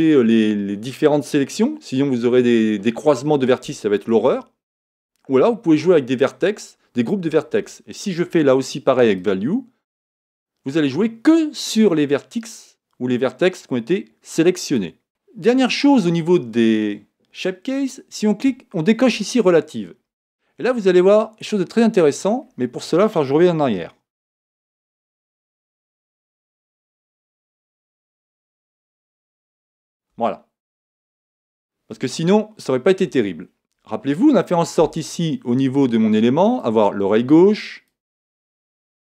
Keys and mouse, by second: 9.2 click, 19.1 click, 22.4-24.5 middle drag, 24.5 ctrl+z, 29.6 ctrl+z, 31.0-36.6 middle drag, 36.6-39.0 drag.